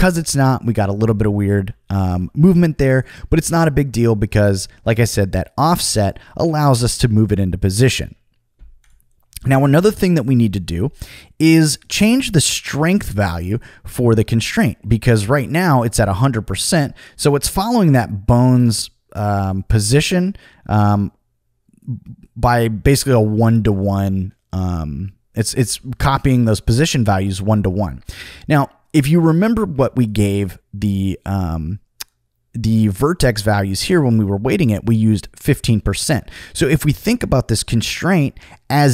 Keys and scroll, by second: 1.6 super+z, 25.7 super+z.